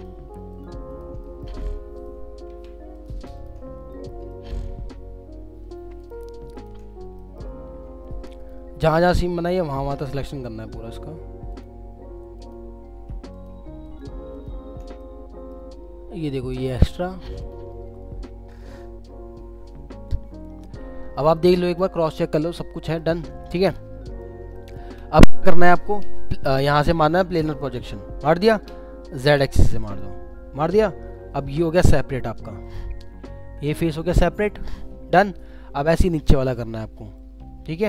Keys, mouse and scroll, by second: 1.2 middle click, 2.5 ctrl+z, 2.9 ctrl+click, 3.7 scroll down 1, 3.9 alt+middle click, 5.0-5.7 scroll up 1, 6.0 ctrl+click, 6.9-7.2 scroll down 1, 7.2 alt+middle click, 8.4 ctrl+click, 9.4 ctrl+click, 9.7 middle click, 10.8 ctrl+click, 13.0 ctrl+z, 13.3 ctrl+click, 13.8 ctrl+click, 15.0 middle click, 15.8 scroll up 1, 16.6 alt+click, 17.7 scroll down 2, 18.6 alt+middle click, 20.7 scroll down 1, 21.3 alt+scroll down 1, 21.4 alt+middle click, 23.2 scroll down 1, 23.5 alt+middle click, 31.2 scroll down 1, 32.6 double click, 36.2 alt+middle click, 37.4 scroll up 1.